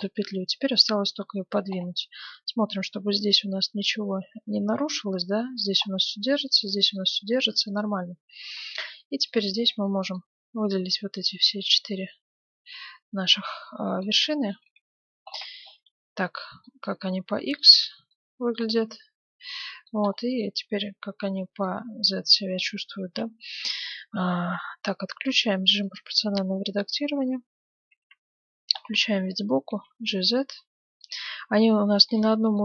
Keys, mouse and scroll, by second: 5.5-6.4 scroll down 1, 6.4-7.8 middle drag, 7.8 right click, 8.3 Tab, 8.9 right click, 9.1-12.4 middle drag, 9.5 a, 9.6 b, 11.7-13.6 drag, 14.6 KP_7, 15.2-21.2 middle drag, 16.6-18.5 drag, 20.4 z, 21.6-23.1 drag, 23.0 ctrl+z, 23.4 click, 25.3-27.0 drag, 26.6-28.0 middle drag, 28.0 KP_3, 28.7 scroll up 1, 28.8 middle click, 29.6 g, 31.7-32.6 middle drag.